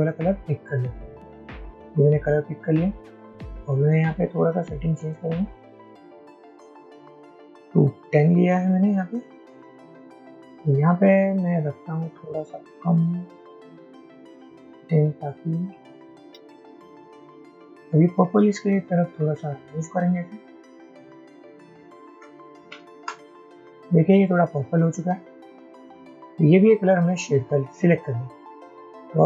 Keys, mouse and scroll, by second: 1.2 typing, 11.7 typing, 19.7-20.1 typing.